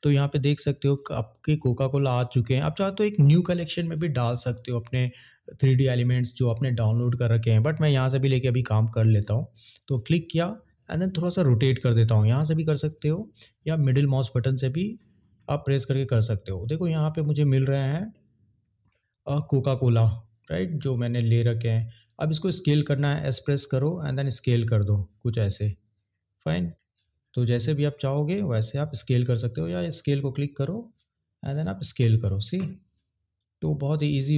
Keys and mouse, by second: 8.9 click, 13.9 middle click, 18.0-18.9 shift+middle drag, 26.7 click, 29.0 ctrl+z, 29.7 click, 31.0 click, 33.4 click.